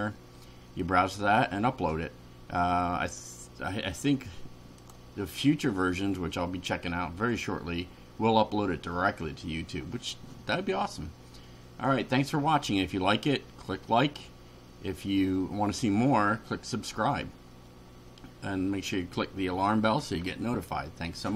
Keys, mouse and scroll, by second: 4.8 click.